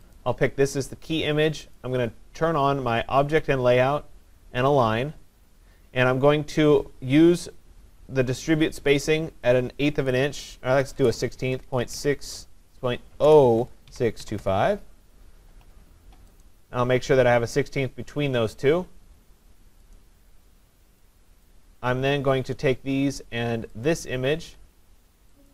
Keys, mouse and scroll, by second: 0.2 click, 1.8 click, 4.7 click, 9.5 click, 10.1-14.7 typing, 16.4 click, 16.4 typing, 20.0 click, 21.5 click, 23.9 shift+click.